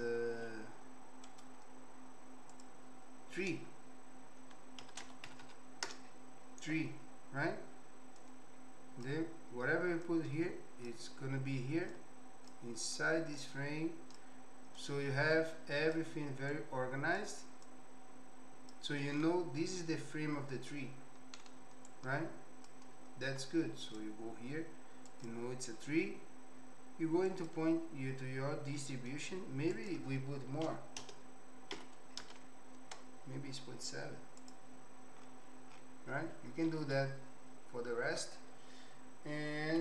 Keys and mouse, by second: 1.4-7.0 right drag, 5.4 e, 8.3 click, 10.2 click, 12.0 click, 13.5 click, 14.8-16.1 drag, 16.6 click, 17.8-18.9 drag, 19.9-20.9 drag, 22.0 click, 25.3 click, 28.8 middle click, 29.7-33.2 drag, 34.6 click, 36.6 middle click.